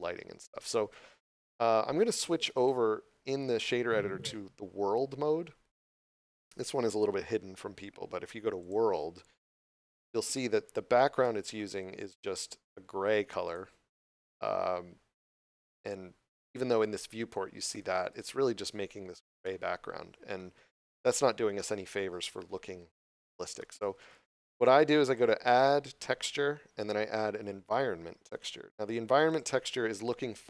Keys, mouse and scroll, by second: 2.4 click, 8.5 click, 10.2 scroll up 1, 13.3 click, 18.0 click, 18.6 scroll down 1, 19.3 middle click, 20.5 scroll up 1, 21.4 middle click, 24.9 click, 28.2 click.